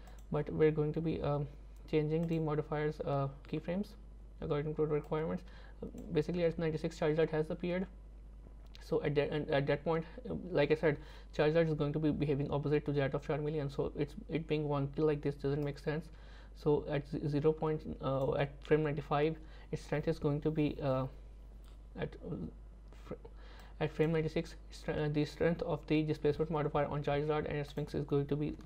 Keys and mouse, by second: 2.3 click, 5.0-6.0 drag, 15.7-18.3 drag, 23.6 click, 27.8 click.